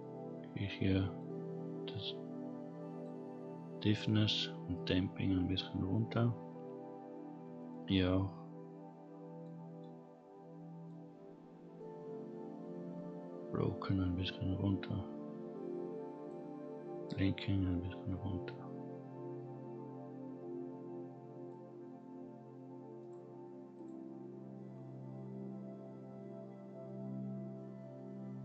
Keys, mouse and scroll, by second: 1.2-3.0 drag, 4.7-6.2 drag, 6.6-6.9 scroll up 2, 7.7-9.5 drag, 9.8-10.9 drag, 11.4-12.2 scroll down 3, 12.9-16.3 drag, 17.1-21.5 drag, 23.0 click, 23.7 drag.